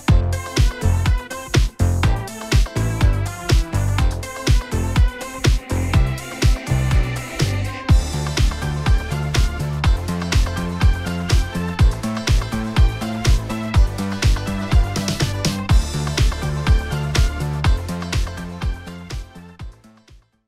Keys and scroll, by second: 4.8 alt+F9.